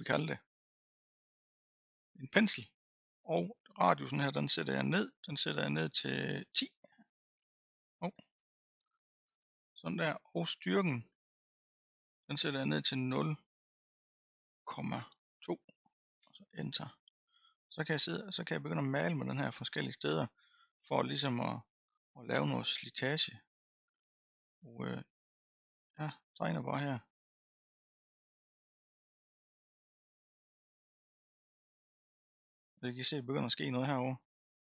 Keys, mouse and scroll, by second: 4.1-7.1 drag, 8.3 BackSpace, 11.5-14.5 drag, 18.3-19.6 scroll up 3, 19.6-20.1 scroll down 3, 21.6 click, 22.5-24.3 scroll up 4, 24.3 middle click, 25.1-26.5 scroll up 1, 26.5-29.5 drag, 29.6-34.7 drag.